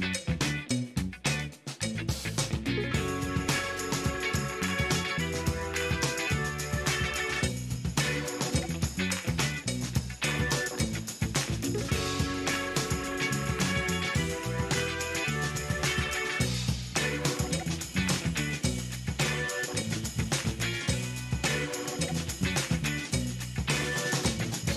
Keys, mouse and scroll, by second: 10.6 shift+right click, 13.2 shift+right click, 14.7 shift+right click, 15.7 shift+right click, 17.1 shift+middle click, 17.9 shift+right click, 21.4 shift+middle click, 22.9 shift+scroll down 1, 23.5 shift+middle click.